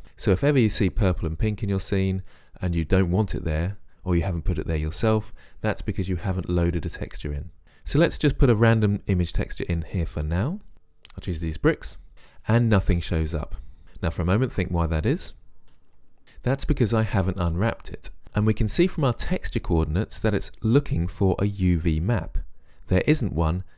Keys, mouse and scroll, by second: 12.1 Return.